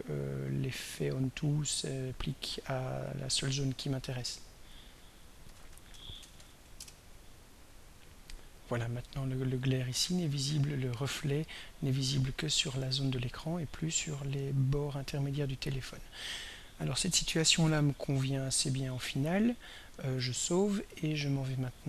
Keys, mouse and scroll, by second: 2.3 click, 3.2 click, 4.2 click, 5.4 ctrl+a, 5.7 ctrl+s, 5.9 ctrl+c, 6.1 ctrl+r, 6.2 ctrl+e, 6.5 ctrl+n, 6.8 ctrl+Return, 8.0 click, 8.8 click, 12.3 click, 14.3 click, 20.4 ctrl+s.